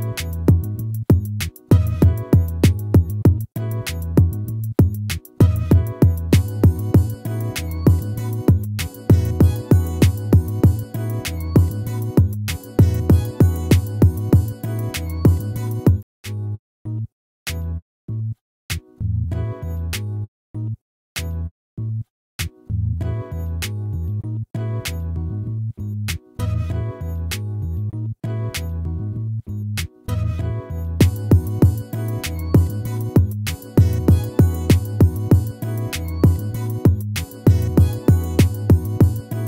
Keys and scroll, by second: 2.1 ctrl+-, 13.1 ctrl+-, 35.0 ctrl+-, 37.9 ctrl++.